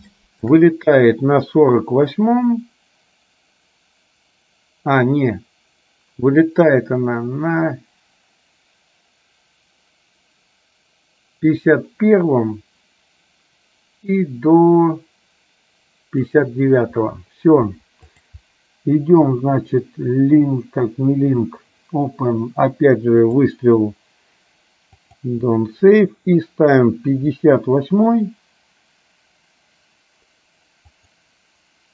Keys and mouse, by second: 0.2 shift+middle click, 2.3-16.4 drag, 18.2-25.4 drag, 31.1 click.